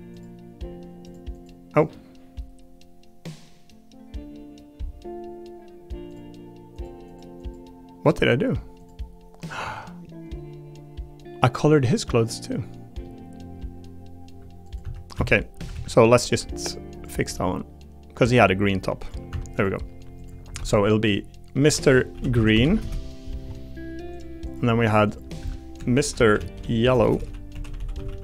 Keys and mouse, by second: 0.1 click, 1.0 click, 1.3 click, 6.1 click, 7.1 click, 7.4 click, 12.3 middle click, 14.8 Tab, 15.1 a, 15.6 a, 15.7 a, 16.2 b, 17.2 g, 19.0 click, 19.3 Tab, 20.2 click, 20.5 F2, 22.5 e, 24.1 click, 24.4 click, 25.4 F2, 27.1 BackSpace, 27.7 l.